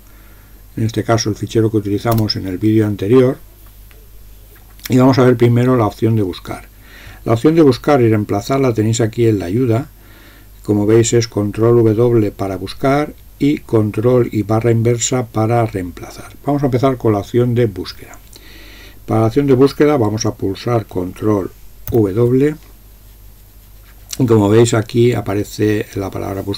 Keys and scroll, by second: 2.2 Return, 21.9 ctrl+w.